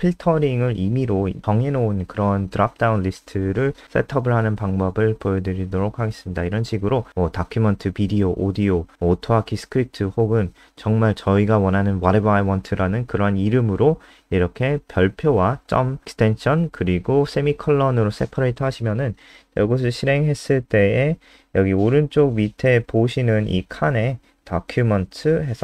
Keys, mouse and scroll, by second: 18.8 ctrl+s, 19.1 F5, 20.5 click.